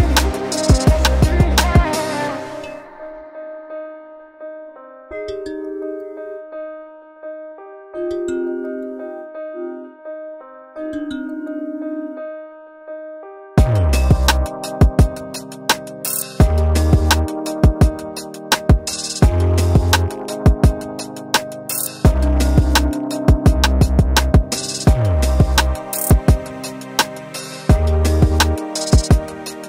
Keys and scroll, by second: 8.5 v, 10.1 ctrl+[, 19.9 ctrl+shift+n, 20.6 Return, 21.7 Return, 23.2 shift+space.